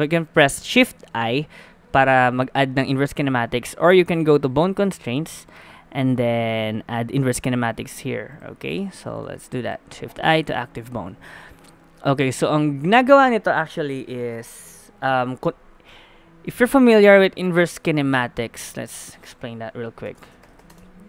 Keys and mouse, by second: 1.2 shift+i, 9.3 shift+i.